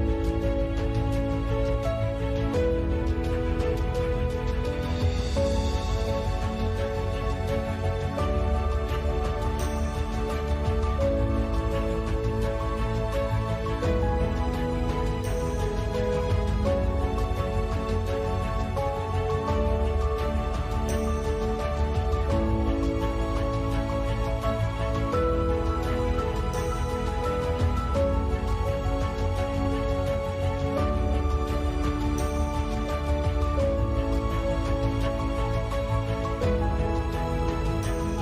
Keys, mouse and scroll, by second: 2.1-4.7 typing, 3.5 ctrl+s, 5.8 t, 6.7 click, 7.1 middle click, 8.5 click, 9.2 click, 10.8 click, 11.7 click, 13.3 click, 14.6-15.1 middle drag, 14.6-15.1 scroll up 1, 15.1 g, 16.3-17.0 right drag, 16.6 s, 17.2 click, 18.0 a, 18.1 ctrl+s, 19.2 a, 19.3 ctrl+s, 19.9 click, 20.3 click, 23.1 a, 23.1 ctrl+s, 24.1-24.4 middle drag, 24.5 Tab, 24.9 z, 25.2 z, 25.5 z, 26.1 ctrl+b, 28.0 Tab, 28.2 click, 28.7 Tab, 29.1 s, 29.8 s, 32.7 s, 36.5 Tab, 37.2 ctrl+z, 37.5 Tab, 38.0 s.